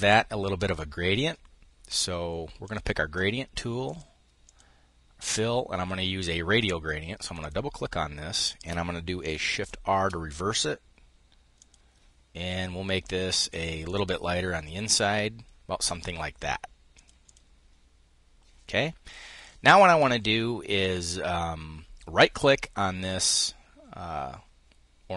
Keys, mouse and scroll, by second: 2.2 click, 3.4 click, 6.8 click, 9.1 shift+r, 11.1 click, 13.4 click, 16.5 click, 20.3 click.